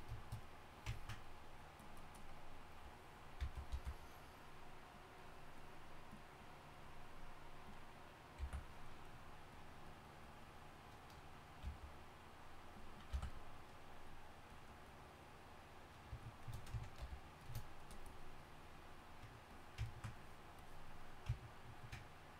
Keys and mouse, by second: 3.4 n, 3.7 n, 8.4 n, 11.6 n, 13.1 n, 17.0 shift+f.